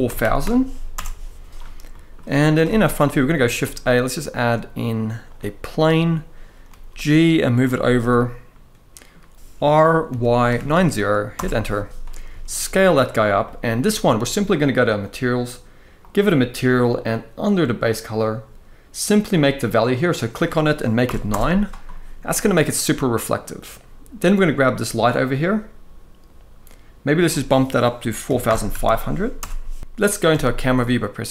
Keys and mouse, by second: 1.6 middle drag, 2.3 KP_1, 3.2 shift+a, 6.4 g, 7.2 click, 7.5 shift+middle click, 8.2-8.8 middle drag, 9.2-12.0 typing, 11.1 Return, 13.1-13.5 middle drag, 15.7 click, 22.6-23.1 middle drag, 26.8-29.1 drag, 28.6 0, 30.0 KP_0.